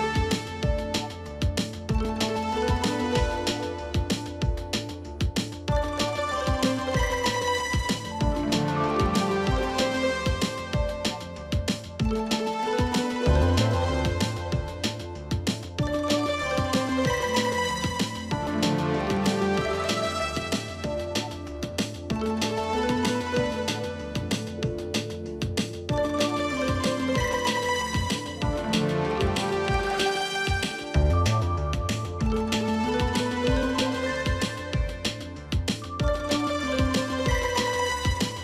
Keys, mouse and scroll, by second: 18.7 right click, 32.9 double click, 33.1 double click, 34.8-36.4 typing.